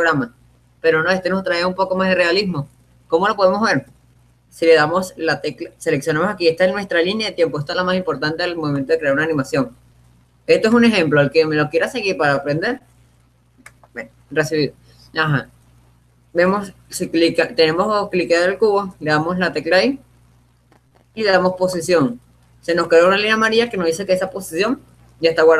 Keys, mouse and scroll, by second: 9.3-10.7 drag, 11.1-12.9 drag, 14.2-15.9 drag, 22.4 i.